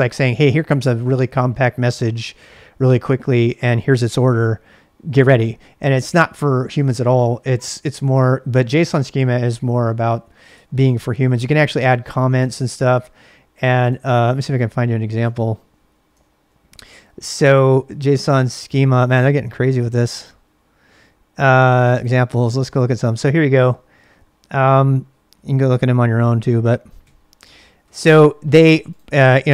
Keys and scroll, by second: 10.5 j, 12.0 j, 12.8 j, 13.9 j, 15.2 ,, 16.2 super+Tab, 25.9 ctrl+=, 26.4 ctrl+=, 27.0 ctrl+=.